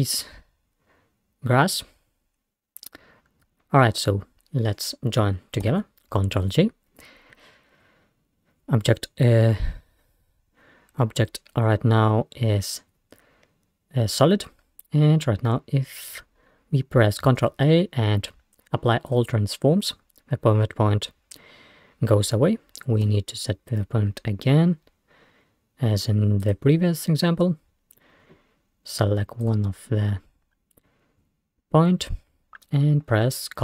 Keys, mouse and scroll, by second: 5.7 ctrl+j, 10.9-11.6 scroll up 1, 11.6-12.0 scroll up 1, 12.0-13.6 scroll down 1, 13.6 scroll down 1, 17.4 ctrl+a, 23.1 Tab, 26.4 click, 28.6-28.9 scroll up 1, 29.5 click.